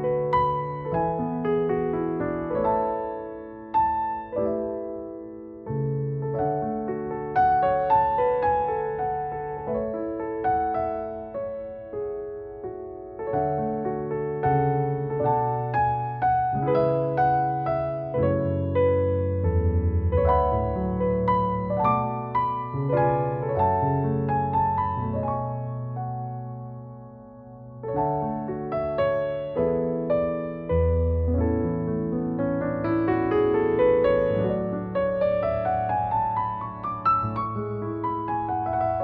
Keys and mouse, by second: 2.6 e, 4.1 s, 6.6 click, 8.4 e, 8.7 z, 9.5 z, 11.9 ctrl+z, 12.5 shift+middle click, 13.2 g, 14.5 alt+middle click, 16.2 Tab, 16.9 Tab, 17.5 2, 18.3 e, 22.0 ctrl+z, 22.3 ctrl+z, 22.7 ctrl+z, 23.5 Tab, 24.3 g, 25.8 Tab, 26.4 click, 26.8 Tab, 27.5 2, 27.7 click, 27.8 click, 28.5 e, 30.6 click, 30.9 middle click, 32.1 x, 33.7 click, 34.3 alt+middle click, 35.3 click, 35.4 click, 36.0 g, 36.1 z.